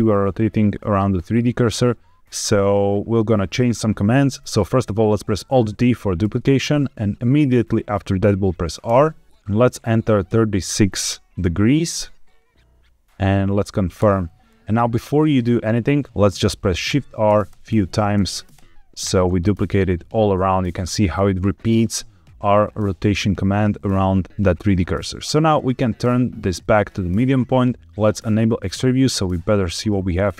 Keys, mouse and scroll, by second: 6.2 alt+d, 8.8 r, 10.2 KP_3, 10.6 KP_6, 13.9 KP_Enter, 16.8-19.0 typing, 25.5-26.8 drag, 28.3 click, 28.8-29.8 middle drag.